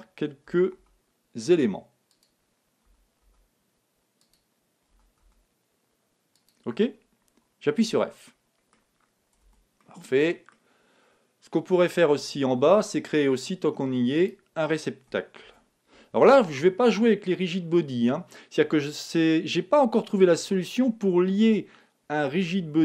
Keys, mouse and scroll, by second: 0.5 e, 2.8 e, 4.3-6.2 drag, 4.9 e, 7.8 f, 8.3-11.6 middle drag, 9.4 Tab, 12.3 KP_1, 14.2-15.9 right drag, 15.4 shift+a, 15.9 right click.